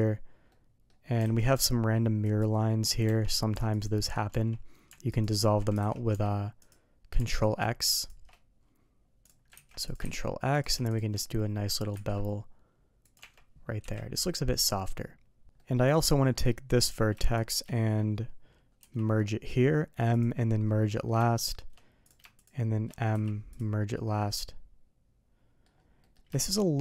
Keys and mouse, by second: 0.4-0.8 middle drag, 1.2 alt+a, 2.2 alt+click, 3.0 Tab, 3.7 alt+click, 4.2 Tab, 5.1 alt+click, 5.7 alt+a, 6.0 Tab, 8.0 shift+click, 9.5 ctrl+x, 10.5 click, 10.9 shift+click, 11.2-11.6 middle drag, 12.1 ctrl+b, 15.6 middle click, 16.3 middle click, 17.4 shift+click, 20.6-21.0 middle drag, 21.2 shift+middle drag, 22.0 click, 24.2-25.6 middle drag, 25.9 middle click, 26.3 shift+middle drag.